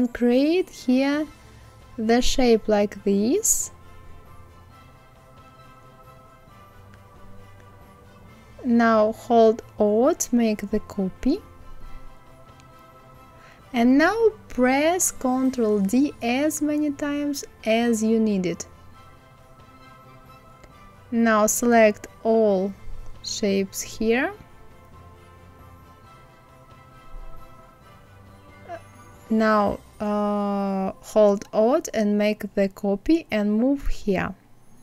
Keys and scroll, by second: 14.5 ctrl+d, 17.6 ctrl+d.